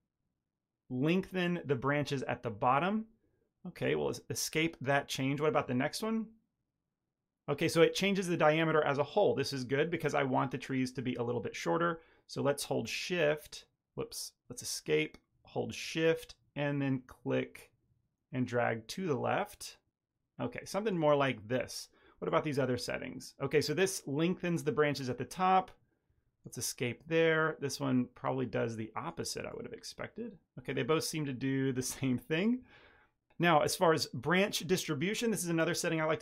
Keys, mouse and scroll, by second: 5.4 click, 12.3 click, 16.1 shift+click, 22.2 click, 27.0 click, 29.4 click, 35.8 click.